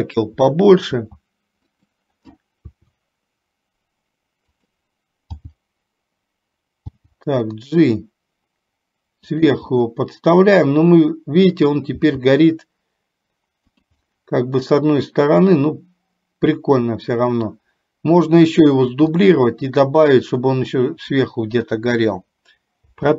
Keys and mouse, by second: 1.9 s, 2.8 r, 5.5 g, 7.0 g, 9.8-12.0 middle drag, 12.5 g, 14.3-17.6 middle drag, 19.4 middle click, 23.0 i.